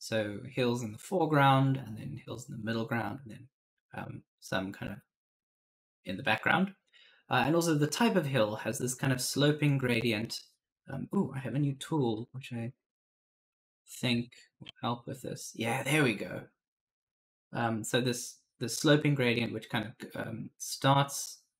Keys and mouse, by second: 12.5 F11, 13.9 shift+F1, 14.9 click.